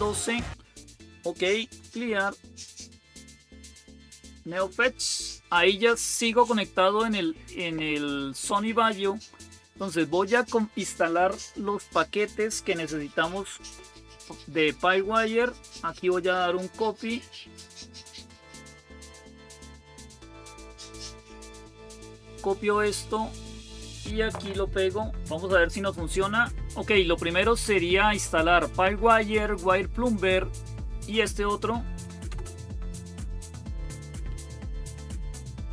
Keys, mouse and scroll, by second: 0.6-6.3 typing, 12.3-14.6 typing, 16.3-18.8 drag, 19.2 click, 19.4 right click, 21.5 click, 24.9 ctrl+v, 31.1 Right, 32.1 Return, 33.4-35.7 typing.